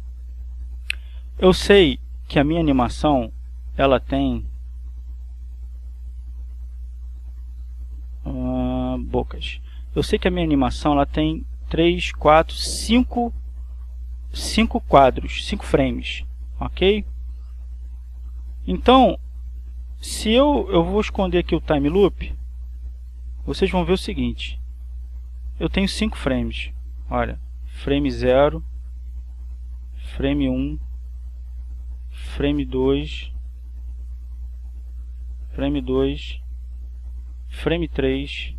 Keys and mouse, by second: 3.3 click, 4.5 click, 5.7-6.8 drag, 7.5 click, 9.3 click, 10.4 click, 11.0 click, 12.4-13.4 drag, 15.1-16.6 drag, 17.2-18.5 drag, 20.5 click, 21.8 click, 24.0-27.3 drag, 29.3 click, 31.6 click, 34.0-35.7 drag, 37.1 click.